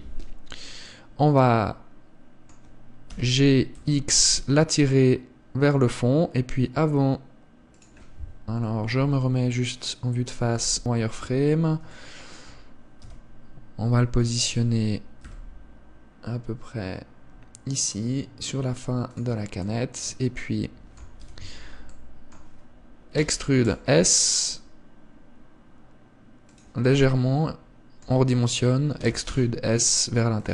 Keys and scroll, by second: 3.4 g, 9.2 KP_1, 10.8 z, 13.4 g, 21.6 z, 23.7 e, 29.4 e.